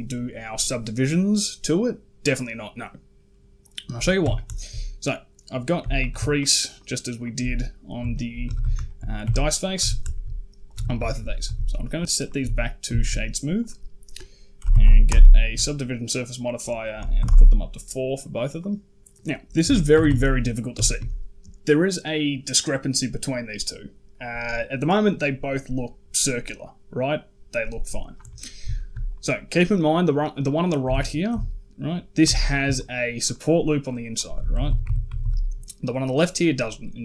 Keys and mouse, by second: 4.0 Tab, 4.4 shift+middle click, 5.7 alt+click, 6.5 alt+shift+click, 7.0 alt+shift+click, 7.9 shift+middle click, 8.3 a, 8.4 a, 8.7 shift+click, 9.1 Tab, 9.5 click, 9.6 Tab, 9.9 shift+click, 10.6 Tab, 10.9 shift+drag, 11.3 q, 12.0 click, 12.2 q, 12.8 shift+middle click, 13.4 click, 16.0-17.1 drag, 18.4 click, 18.7 Tab, 18.7 a, 19.4 KP_Decimal, 19.8 a, 19.9 a, 20.7 shift+drag, 28.6 shift+middle drag, 28.9 right click, 30.7 Tab, 31.1 z, 32.1 alt+click, 32.6 alt+shift+click, 33.1 alt+shift+click, 33.3 alt+shift+click, 33.6 alt+shift+click, 34.0 alt+shift+click, 34.4 a, 34.5 a, 34.7 Tab, 34.9 a, 35.0 a.